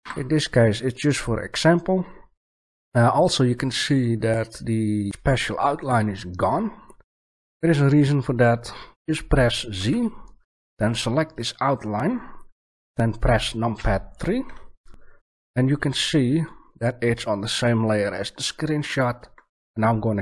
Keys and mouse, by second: 9.7 z, 10.7-12.4 right drag, 13.7 KP_3, 15.8-17.2 middle drag.